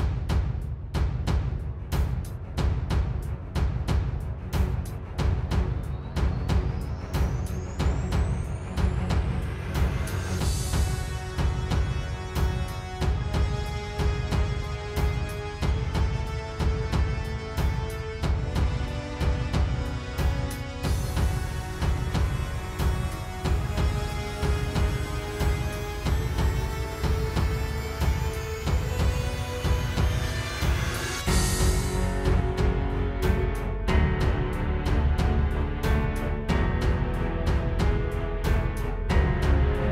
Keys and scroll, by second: 1.0 space, 2.2-5.2 typing, 5.9 super+space, 11.0 super+j, 13.6 super+], 15.4 space, 21.0 space, 21.5 space, 25.7 space, 27.8 space, 29.5 space, 31.2 space, 31.8 space, 34.5 super+z, 34.8 super+z, 38.5 space, 38.8 space.